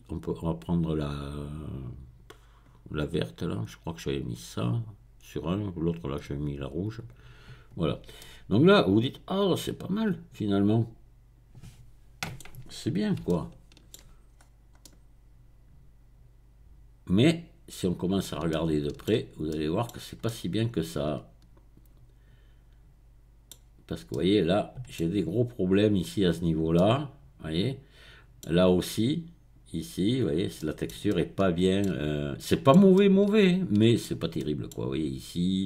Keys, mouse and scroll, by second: 4.2 click, 8.2-12.6 middle drag, 12.6-13.3 scroll up 1, 13.3 shift+middle click, 14.8-15.6 scroll up 2, 18.5-19.1 shift+scroll down 2, 19.9-20.2 scroll down 2, 21.1 shift+middle click, 23.6 middle click, 23.6-24.1 scroll down 1, 26.3 middle click, 26.3-26.8 scroll down 1, 30.2 middle click, 30.2-30.6 scroll down 1, 32.0 middle click, 32.0-32.4 scroll down 1, 32.7 shift+middle click.